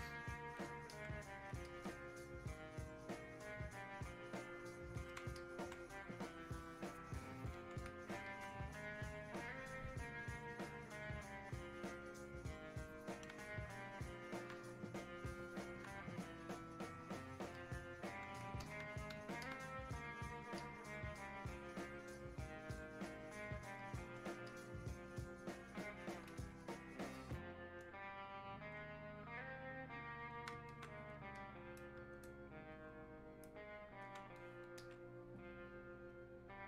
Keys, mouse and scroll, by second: 1.0 alt+click, 1.7-5.4 drag, 8.3-11.5 alt+drag, 13.6-30.7 alt+drag, 30.7 alt+click, 31.4-34.4 drag, 34.4-36.1 alt+drag, 36.1-36.6 drag.